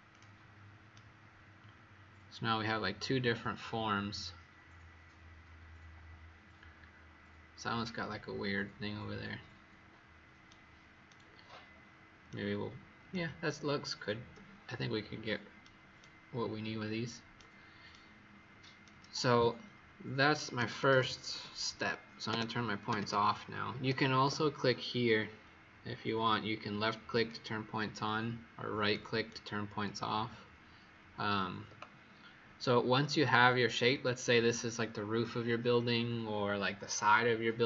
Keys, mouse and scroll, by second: 0.9 right click, 20.5-23.3 typing, 24.1 Escape, 27.0 click, 28.8 right click.